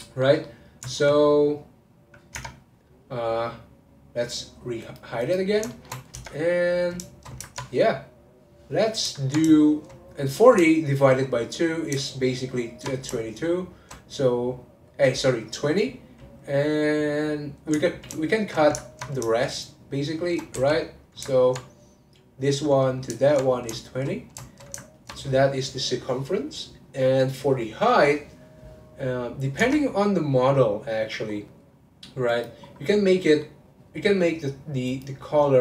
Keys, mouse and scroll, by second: 0.0-2.3 middle drag, 2.3 Tab, 4.8 click, 5.2 click, 5.7 shift+middle click, 6.1 Tab, 7.1-10.3 shift+middle drag, 10.3 click, 10.7-12.1 shift+middle drag, 12.1 ctrl+click, 13.3 shift+click, 13.5 shift+click, 17.9 alt+click, 18.2 alt+shift+click, 18.8-19.9 ctrl+middle drag, 19.9 shift+click, 20.5 x, 21.4 ctrl+middle click, 22.3 click, 23.2 ctrl+click, 23.8-28.0 shift+middle drag, 29.6 Tab, 30.5-31.3 scroll down 5, 31.3-32.3 scroll down 1, 32.3 click, 32.6 scroll down 1, 32.9-35.6 middle drag.